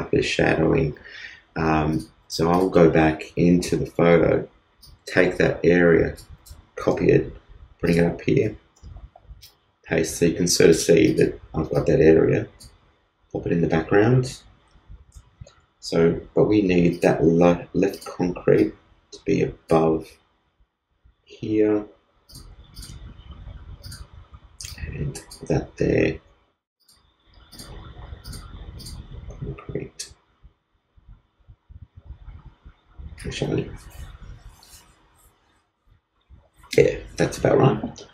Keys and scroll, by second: 6.8 super+c, 8.7 super+v.